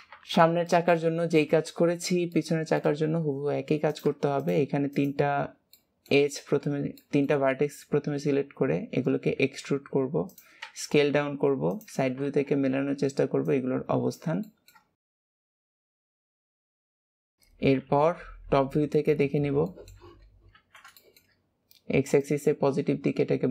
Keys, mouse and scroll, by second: 0.6 shift+middle click, 1.2-1.6 scroll up 2, 2.2 shift+middle click, 2.9 scroll up 2, 3.8 click, 4.3 shift+click, 4.9 shift+click, 5.6 shift+middle click, 6.4-6.9 scroll up 1, 6.9-9.0 shift+middle drag, 9.0 e, 13.4 click, 14.4 shift+middle click, 14.8-15.1 scroll up 2, 15.1 click, 15.3 g, 15.8 click, 15.9 g, 17.3 shift+click, 19.6 shift+middle click, 20.1-20.5 scroll up 4, 20.5 alt+z, 20.9 shift+middle click, 21.3-22.1 scroll up 3, 22.1 click.